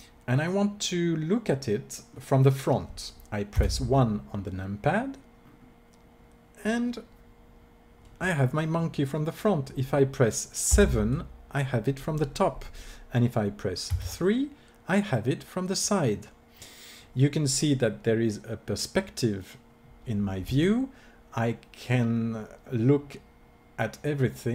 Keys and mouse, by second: 1.7 middle click, 3.5 KP_1, 10.6 KP_7, 13.9 KP_3, 21.5 click.